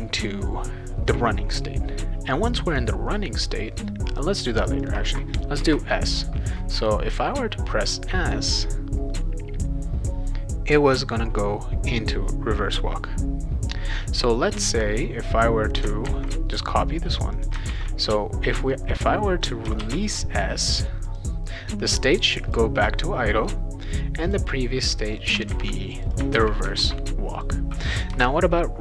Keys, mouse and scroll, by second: 2.7 click, 4.8 click, 5.6 Return, 14.8-15.8 drag, 16.0 ctrl+c, 17.4 click, 17.7 ctrl+v, 19.0 click, 19.8 shift+s, 21.1 click, 22.2 click, 22.5 click, 24.2 click, 25.0 click, 25.2 click, 25.5 ctrl+c, 25.9 click, 26.1 click, 26.4 ctrl+v, 26.8 ctrl+s, 27.3 click, 28.1 Return.